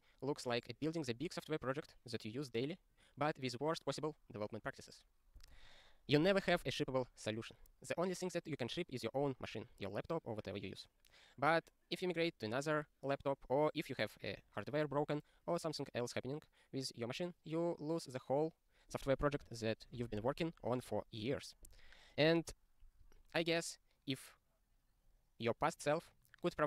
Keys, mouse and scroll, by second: 19.1-21.5 scroll, 22.0 scroll down 1, 22.9 click.